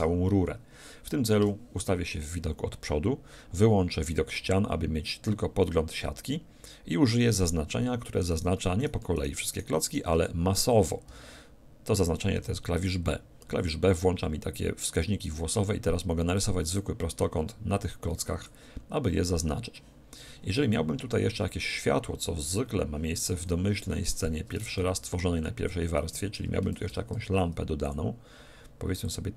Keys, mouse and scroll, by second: 1.4 KP_1, 4.3 z, 8.3-11.8 right drag, 11.1 a, 12.4 b, 24.8 shift+a, 26.8 shift+a.